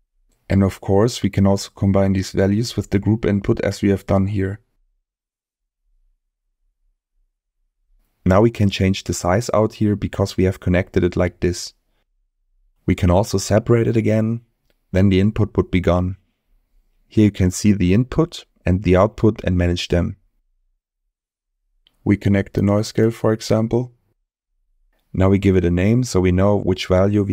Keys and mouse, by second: 4.0 middle click, 5.8 middle click, 7.0 click, 9.5 click, 11.5-13.0 drag, 14.5-15.5 drag, 17.7 click, 19.5 middle click, 22.2-24.5 drag, 25.7-27.3 drag.